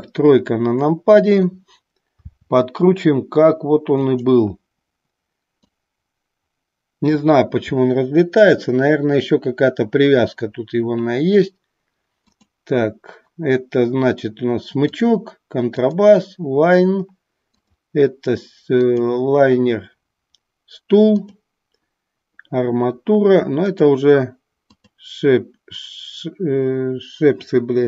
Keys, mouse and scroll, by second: 2.1 r, 4.2 click, 5.5-7.2 drag, 12.2 click, 14.8 click, 15.8 click, 17.5 click, 18.9 click, 21.1 click, 23.6 click, 24.7 click.